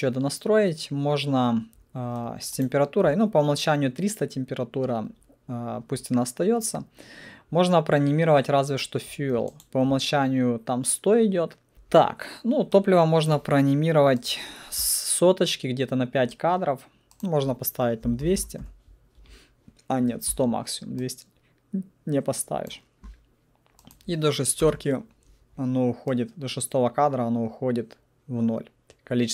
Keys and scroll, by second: 11.7 ctrl+Delete, 17.8-18.8 typing, 24.6 0, 25.0 Return.